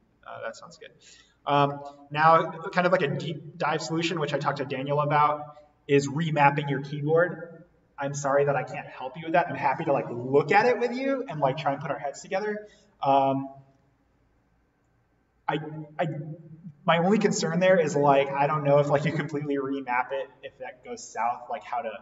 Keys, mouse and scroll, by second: 2.9-8.1 drag.